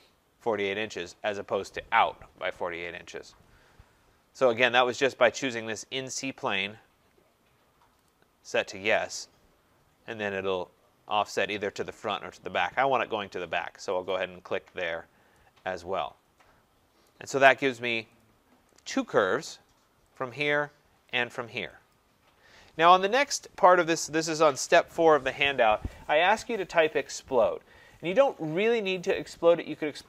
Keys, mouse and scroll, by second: 6.3 click, 8.1 click, 14.1 click, 14.9 middle click, 15.0 middle click, 17.1 right click, 17.6 middle click, 17.6 middle click, 18.2 click, 19.2 right click, 20.2 click, 21.9 click.